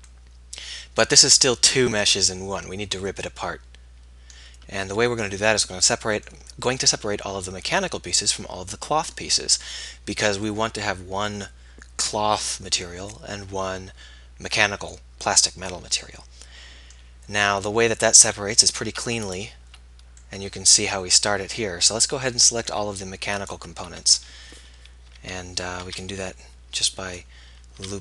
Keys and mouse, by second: 4.5-5.5 middle drag, 16.0 middle click, 18.0-19.4 middle drag, 21.8 middle click, 25.2 z, 25.9 b.